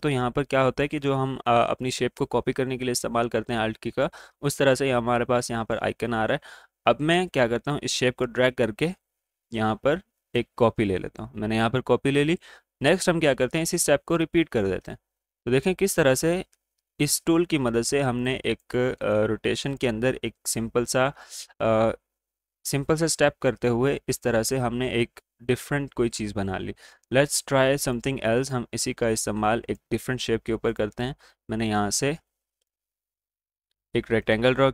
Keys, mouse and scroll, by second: 7.7-13.8 alt+drag, 13.8 ctrl+d, 18.2-22.4 drag, 27.7 right click, 28.8-30.9 drag, 31.9-32.7 alt+scroll up 1, 32.7-34.7 drag.